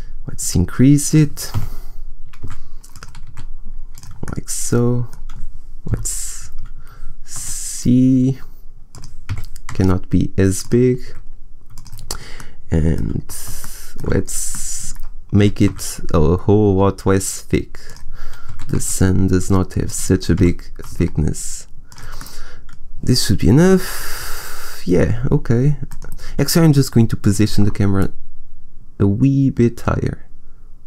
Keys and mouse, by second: 0.6 click, 1.4 g, 2.8 click, 3.2 s, 4.2 click, 5.8 KP_0, 7.5 s, 9.0 click, 9.3 g, 11.0 g, 11.2 s, 12.4 middle click, 13.2 middle click, 15.3 s, 18.4 s, 19.9 click, 20.3 g, 22.1 click, 22.5 middle click, 23.5 KP_0, 27.9-29.6 middle drag.